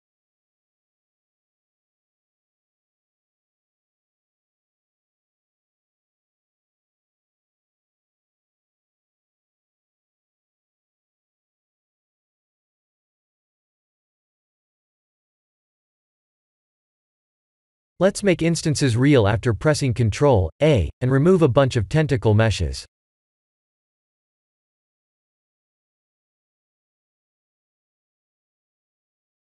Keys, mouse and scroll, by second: 0.8 w, 3.0 click, 3.7 click, 4.7 click, 7.1 click, 15.0 click, 15.7 click, 19.1 ctrl+a, 22.6 m, 27.9 click.